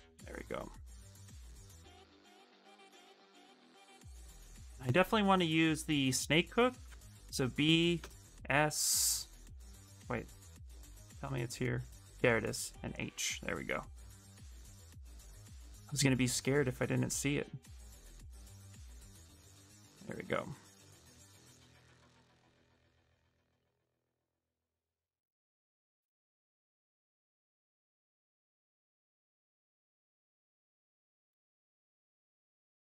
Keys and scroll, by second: 4.9-7.7 typing, 10.2 b, 10.5 s, 13.7 s, 17.3 ctrl+z, 29.2 ctrl+z, 29.9 ctrl+z, 30.2 ctrl+z, 31.0 space, 32.3 space.